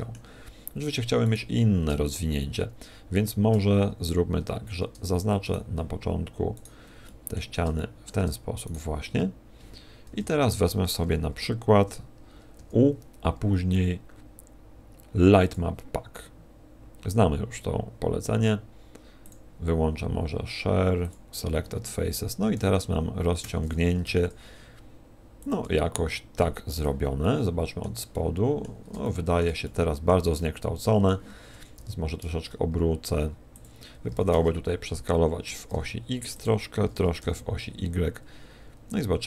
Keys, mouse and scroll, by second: 1.2 right click, 5.4 shift+right click, 6.5 shift+right click, 7.1 shift+middle click, 7.7 middle click, 8.7 shift+right click, 10.1 KP_7, 12.5 u, 22.5 s, 24.1 s, 25.6 click, 25.6 g, 26.9 click, 27.2 middle click, 28.1 middle click, 29.0 shift+middle click, 29.6 middle click, 30.3 middle click, 31.7 r, 34.1 ctrl+click, 34.1 s, 35.3 s, 35.7 click, 35.7 g, 36.9 s.